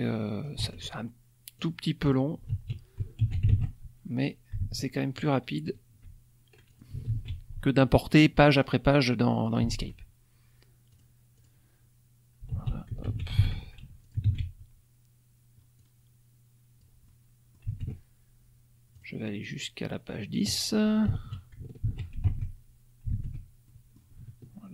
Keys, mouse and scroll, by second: 0.6 alt+Tab, 1.5 click, 2.0 click, 2.5 ctrl+a, 3.2 ctrl+c, 3.5 ctrl+alt+Tab, 4.6 alt+Tab, 6.6 ctrl+click, 7.0 ctrl+v, 8.5-9.6 drag, 9.7 alt+Tab, 10.9 click, 11.3 click, 12.5 ctrl+a, 13.0 ctrl+c, 13.5 ctrl+alt+Tab, 14.0 ctrl+click, 14.2 ctrl+v, 15.7-17.0 drag, 17.0 middle click, 18.0 alt+Tab, 18.9 click, 19.4 click, 21.0 ctrl+a, 22.1 ctrl+alt+c, 22.3 ctrl+alt+Tab, 23.2 alt+Tab, 23.6 alt+click, 23.8 alt+middle click.